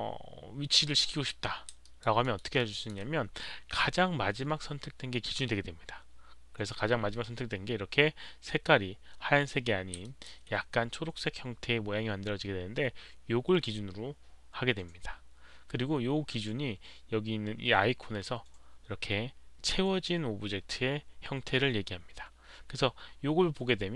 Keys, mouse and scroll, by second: 0.2 alt+click, 0.2 alt+middle click, 1.8 alt+right click, 2.2 alt+middle click, 2.5 alt+click, 10.0 alt+click, 10.2 alt+middle click, 10.2 alt+right click, 13.0 alt+click.